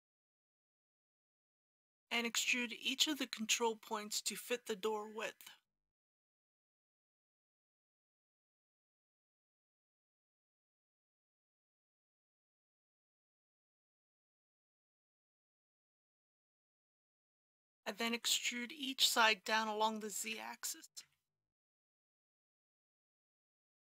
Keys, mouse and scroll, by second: 1.6-3.6 scroll up 1, 6.6 click, 8.0 e, 8.5 x, 10.7 click, 13.9 e, 14.3 x, 17.0 click, 20.2 e, 21.0 z.